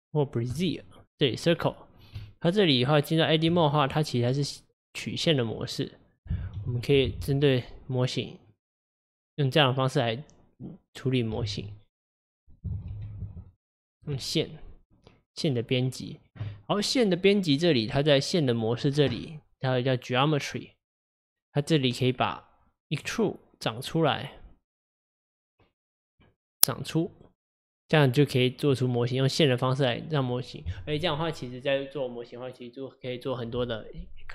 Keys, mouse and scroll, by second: 1.4-2.0 scroll down 1, 2.2 Tab, 3.9 middle click, 4.3 scroll up 2, 5.0 click, 5.4 middle click, 6.2 click, 6.6 g, 11.5 ctrl+z, 12.9 g, 14.2-17.2 middle drag, 18.5 click, 20.5-26.1 drag, 28.8-31.8 middle drag.